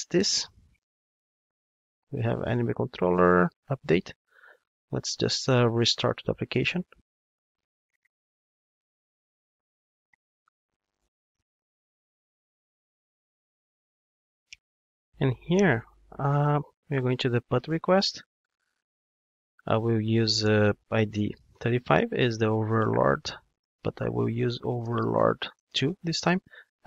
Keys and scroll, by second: 6.2 ctrl+d.